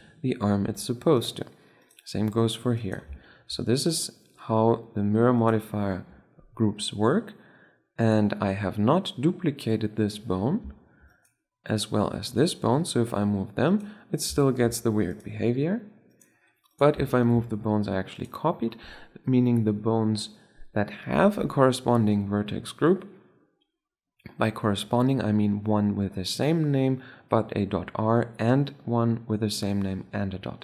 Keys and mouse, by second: 0.6 r, 1.7-3.2 drag, 2.7 r, 3.3 click, 3.6-5.0 drag, 4.1 r, 5.0 right click, 8.6-10.6 middle drag, 11.0-12.8 right drag, 12.6 r, 15.0-19.0 drag, 15.3 r, 18.1 r.